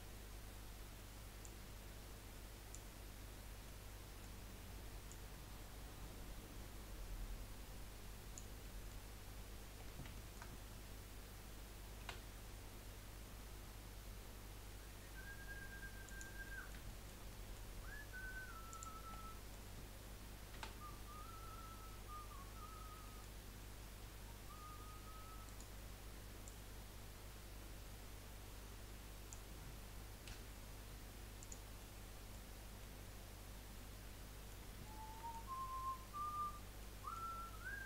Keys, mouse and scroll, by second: 0.4 scroll up 1, 1.4 click, 3.3-3.6 scroll down 4, 3.6 middle click, 4.4 scroll up 2, 5.1 click, 8.6 middle click, 9.2 scroll up 2, 10.1-12.0 shift+middle drag, 12.0 e, 16.4-18.7 middle drag, 18.7 click, 19.0-19.8 scroll up 1, 19.8 middle click, 20.7 e, 26.4 click, 30.4 Delete, 31.8 middle click, 32.6 scroll down 3, 33.0-35.6 middle drag, 35.6 scroll up 1, 36.8-37.8 middle drag.